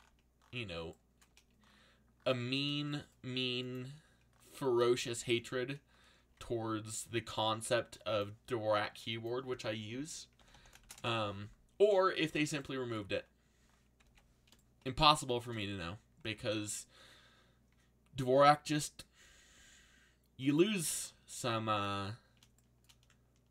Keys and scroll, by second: 3.8 c, 5.3 f, 7.0 ctrl+b, 10.0-11.3 typing, 14.0 ctrl+2, 16.3 ctrl+b.